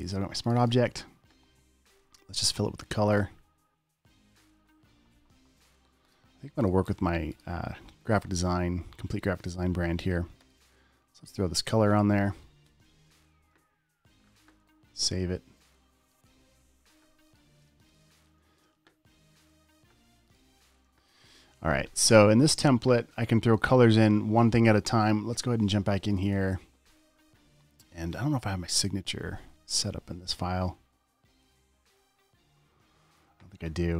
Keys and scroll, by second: 12.9 alt+BackSpace, 13.1 v, 14.8 super+s, 17.9 space, 18.4 space, 18.6 space, 18.9 space.